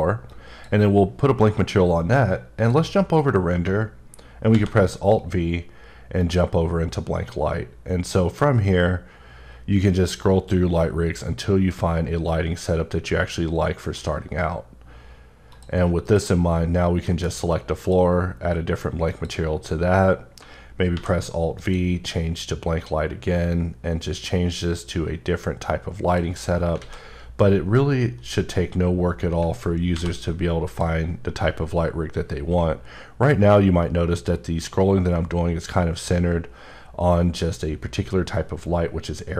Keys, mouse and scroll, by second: 0.3 click, 2.6 click, 4.5 alt+v, 6.2 click, 7.0-8.2 scroll up 2, 8.2-9.4 scroll up 2, 9.9-10.6 scroll up 3, 11.3 scroll up 1, 12.6-13.0 scroll up 2, 13.5 scroll up 1, 14.4 scroll up 1, 15.5 click, 16.0 click, 17.0 alt+m, 17.8 click, 19.1 click, 20.9 alt+v, 21.5 click, 22.0-22.3 scroll up 2, 22.8 scroll up 1, 23.3 scroll up 2, 26.1 click, 26.4 scroll up 3, 26.8 alt+a, 28.3 click, 29.4-29.8 alt+scroll down 1, 29.9 alt+v, 30.6 click, 31.8 scroll up 1, 32.5-33.4 scroll up 2, 33.4-34.6 scroll up 5, 35.1 scroll up 2, 35.7 scroll up 1, 36.3-37.0 scroll up 2, 37.1-37.8 scroll up 4, 38.6 scroll up 2.